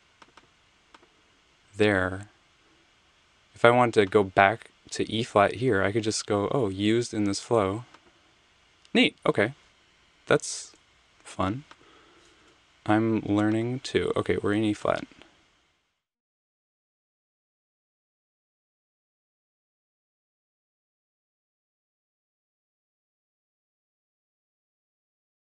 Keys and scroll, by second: 10.8 super+z, 12.4 BackSpace.